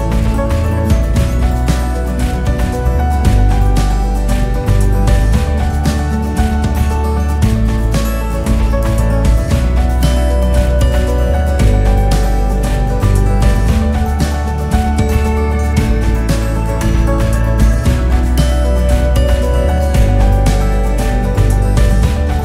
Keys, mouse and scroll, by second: 0.0-22.4 typing, 1.9-2.3 scroll up 5.